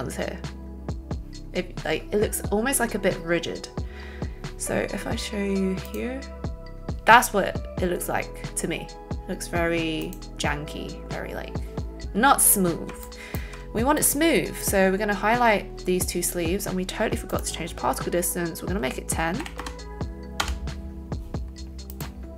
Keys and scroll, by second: 19.4 KP_1, 19.5 KP_0, 20.3 Return.